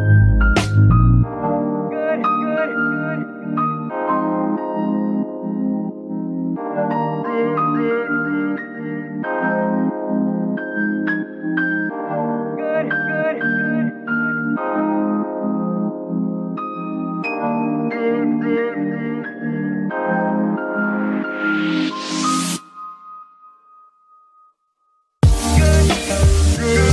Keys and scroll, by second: 0.5 shift+s, 2.3 Tab, 2.8 z, 3.4 g, 4.0 Escape, 4.5 s, 5.6 KP_3, 8.4 g, 8.6 y, 11.8 g, 12.3 y, 14.8 z, 20.3 a, 20.5 z.